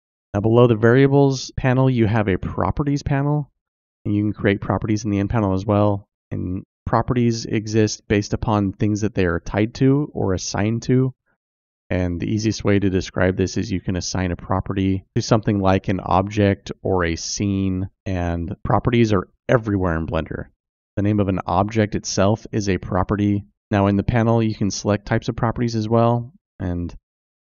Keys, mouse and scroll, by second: 0.7 click.